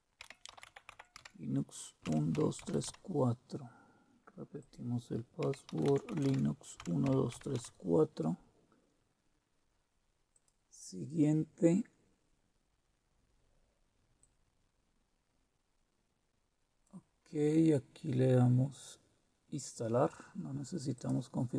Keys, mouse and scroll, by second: 0.2-2.9 typing, 4.6 click, 5.6-7.6 typing, 10.3 click, 14.2-16.9 drag, 17.4 click, 20.9 click.